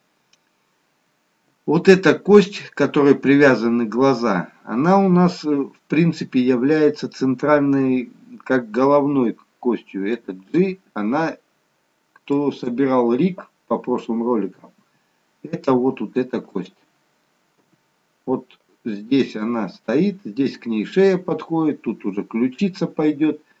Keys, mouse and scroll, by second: 17.7 g, 23.4-23.6 scroll down 1.